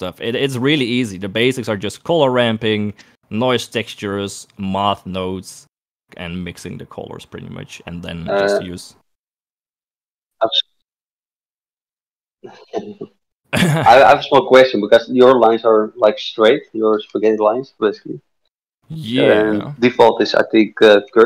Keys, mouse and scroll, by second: 2.5 click, 4.3 click, 5.4-6.4 drag, 7.0 click, 8.6 click, 19.8 click.